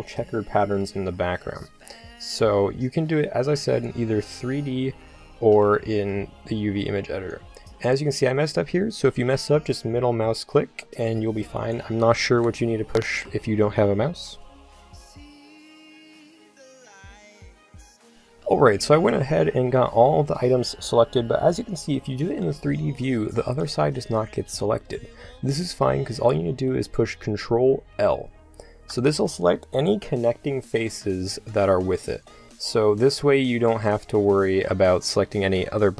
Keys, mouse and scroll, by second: 1.5 c, 11.7-14.5 drag, 13.1 c, 19.5-21.6 middle drag, 28.0 ctrl+l, 32.4 KP_7.